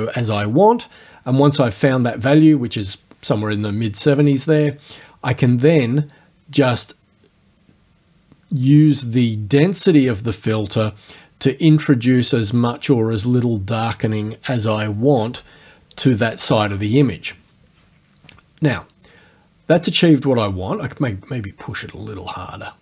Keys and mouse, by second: 5.5-14.9 drag, 21.1 click.